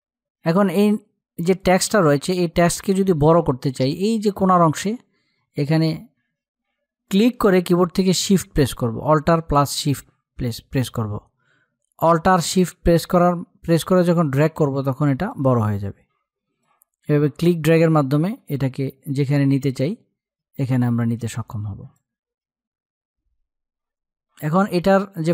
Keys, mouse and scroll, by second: 1.1 click, 6.6-16.2 drag, 16.2-24.0 drag.